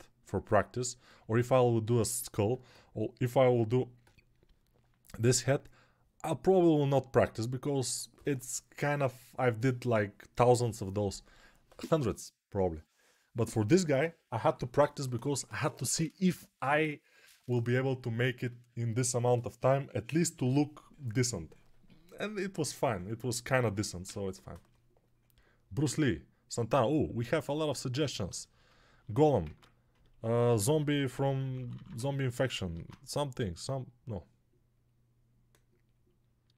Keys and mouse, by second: 29.3 ctrl+Tab, 30.3-31.7 typing, 32.6 alt+q.